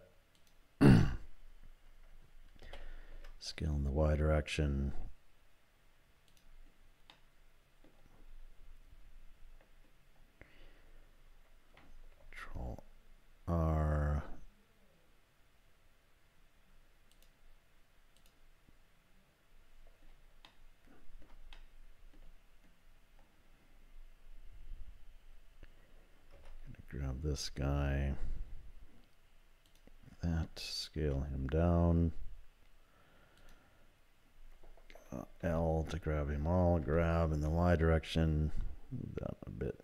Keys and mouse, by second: 2.6 s, 7.1 middle click, 12.1 ctrl+r, 20.6 shift+click, 21.5 click, 26.4 3, 29.7 click, 31.0 s, 35.4 l, 36.8 g.